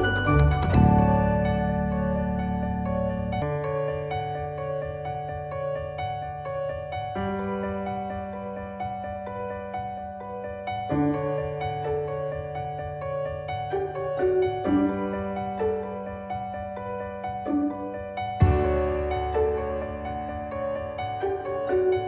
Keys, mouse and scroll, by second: 9.4-9.9 click, 11.8-22.0 drag.